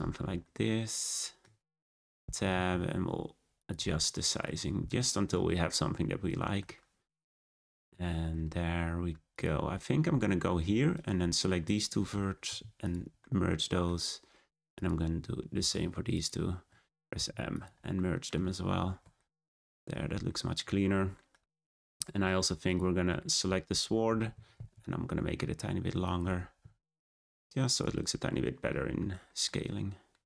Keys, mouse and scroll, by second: 0.1 scroll down 3, 0.4-1.5 middle drag, 1.5 scroll up 4, 1.8 Tab, 2.1 a, 2.2 s, 3.7 Tab, 4.0-4.5 middle drag, 4.5-4.8 scroll down 2, 4.8-9.3 middle drag, 9.3 click, 9.7-10.0 scroll up 4, 10.0 Tab, 10.5 1, 10.9 click, 11.6 shift+click, 12.4 m, 13.2-14.7 middle drag, 14.7 click, 16.1 shift+click, 17.1 m, 17.9 middle click, 18.5 scroll down 2, 18.7 Tab, 19.1 shift+middle drag, 19.4 scroll down 1, 19.5-20.7 middle drag, 20.7-21.1 scroll up 1, 21.1-21.7 shift+middle drag, 21.7-22.1 scroll down 2, 22.1-22.6 shift+middle drag, 22.6 click, 23.1-23.6 middle drag, 23.6 Tab, 24.0 a, 24.3 s, 26.2 Tab, 26.6 g, 27.9 click, 28.3-28.8 middle drag, 28.8-29.2 scroll up 2, 29.2-30.2 shift+middle drag.